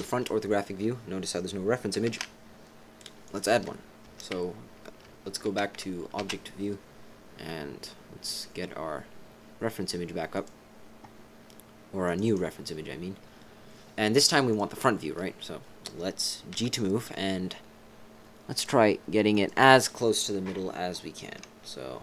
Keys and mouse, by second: 2.0 shift+a, 3.2 click, 4.0 Tab, 6.2 shift+a, 12.3 click, 14.6 right click, 16.5 g.